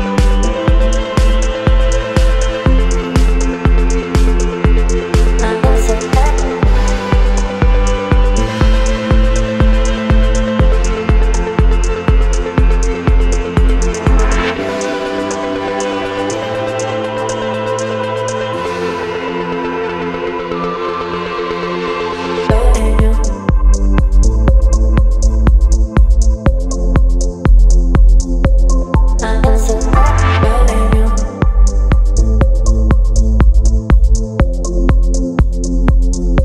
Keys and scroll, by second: 3.6 Delete, 3.6 space, 5.5 Delete, 5.5 space, 7.2 Delete, 8.8 Delete, 8.9 space, 10.5 Delete, 12.7 Delete, 17.3 Delete, 21.1 Delete, 23.6 Delete, 27.2 Delete, 30.5 Delete, 30.9 space, 34.0 Delete, 35.9 Delete.